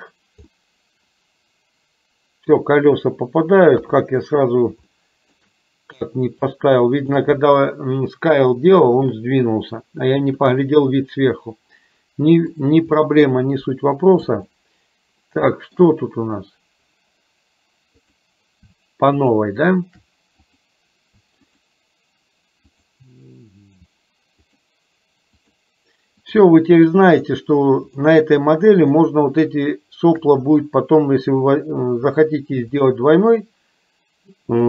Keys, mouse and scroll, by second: 0.6-2.6 middle drag, 3.9 KP_3, 5.0 shift+middle click, 6.6 shift+middle click, 13.0-14.4 middle drag, 14.5-15.9 shift+middle drag, 18.2 click, 19.2 shift+click, 20.5 click, 22.7 shift+click, 23.7 shift+click, 24.5 shift+click, 26.3 shift+click, 33.3 shift+click.